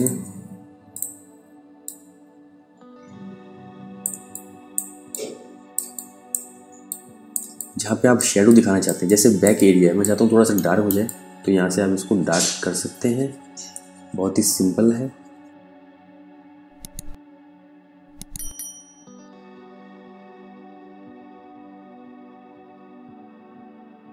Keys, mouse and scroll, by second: 4.2 space, 4.5 click, 6.9 space, 7.0 click, 8.1 space, 8.5 ctrl+alt+click, 10.0 alt+right click, 10.5 click, 19.4 click, 21.7 space, 22.1 click, 23.0 ctrl+space, 23.1 ctrl+click, 23.3 alt+right click, 23.7 space, 23.8 click, 23.9 space.